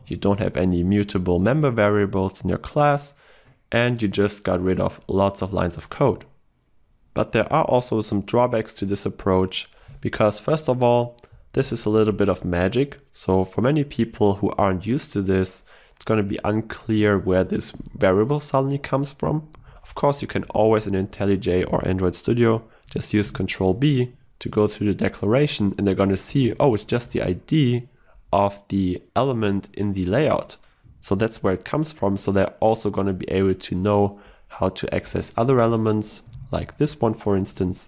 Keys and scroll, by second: 11.6 ctrl+w, 23.5 ctrl+b, 25.4 ctrl+b, 28.1 ctrl+w, 36.4 ctrl+w, 37.3 ctrl+w.